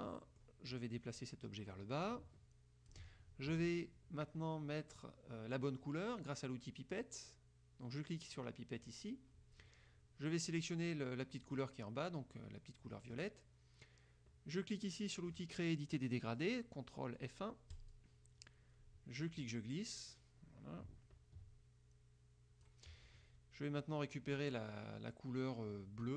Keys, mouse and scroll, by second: 1.3-3.2 drag, 7.2 click, 11.6 click, 17.9 click, 19.4-23.0 drag.